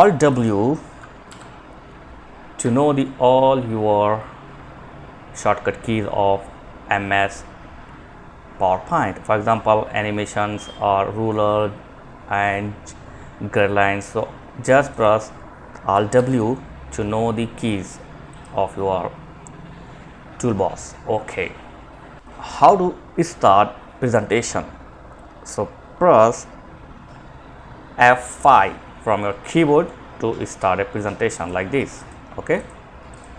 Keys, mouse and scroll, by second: 0.5 alt+w, 14.1 click, 15.3 alt+w, 17.5 click, 28.8 F5, 30.6 click.